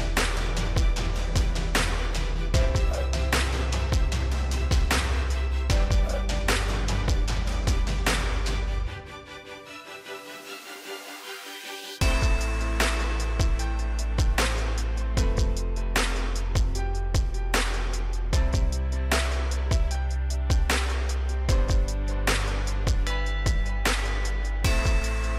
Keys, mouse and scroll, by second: 1.4 ctrl+click, 2.8 click, 7.0 click, 14.3 right click, 15.1 click, 17.8 |, 20.0 click, 22.0 right click, 25.2 click.